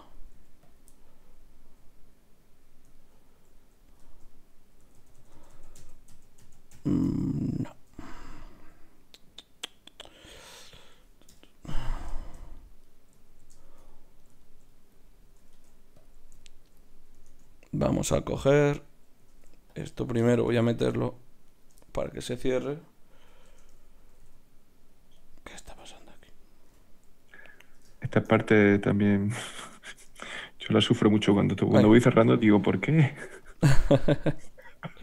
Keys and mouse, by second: 0.3 g, 0.9-1.9 right drag, 4.9 ctrl+z, 5.1 ctrl+z, 5.3 ctrl+z, 5.5 ctrl+z, 5.7 ctrl+z, 6.1 ctrl+z, 6.4 ctrl+z, 6.7 ctrl+z, 7.0 ctrl+z, 7.7 ctrl+z, 11.3 KP_Divide, 15.5 ctrl+Tab, 17.2 ctrl+Tab, 19.3 ctrl+Tab, 20.0-23.4 drag, 23.4 shift+Tab, 24.1 g, 25.6 g, 26.6 KP_Divide, 28.6 g, 29.9 shift+Tab, 30.5 g, 31.9-33.7 drag, 32.1 g, 33.0 g, 33.7-34.8 right drag, 34.8-35.0 drag.